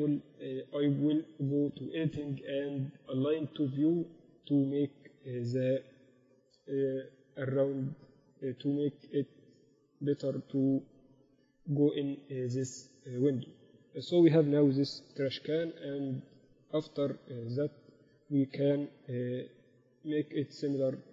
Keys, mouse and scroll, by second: 7.1-8.3 middle drag, 8.3-9.9 drag, 9.5 Escape, 10.0 ctrl+z, 15.1 KP_1, 17.4 Tab, 17.7 z, 18.1 z, 18.7 a.